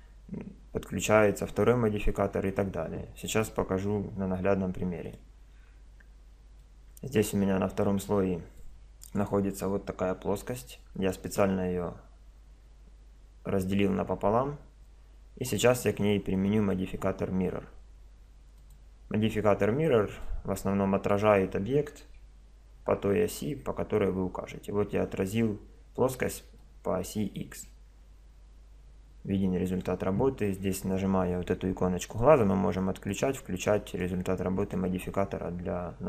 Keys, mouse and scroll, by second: 5.0-6.6 drag, 6.6-9.8 middle drag, 9.2 right click, 16.3-18.2 drag, 20.2-22.1 middle drag, 22.2 KP_7, 25.8-28.5 middle drag, 32.1-36.0 drag.